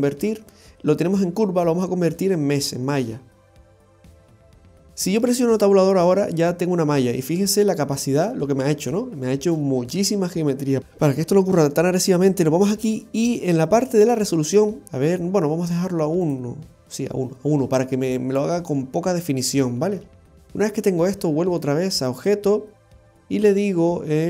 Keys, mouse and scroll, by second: 5.8 Tab, 7.2-8.3 scroll up 1, 8.8 scroll up 1, 10.8 ctrl+z, 11.9-13.1 scroll down 1, 13.1-13.7 scroll down 1, 14.9 middle click, 16.3 click, 17.4-18.4 scroll down 2, 18.4 middle click, 22.2 click.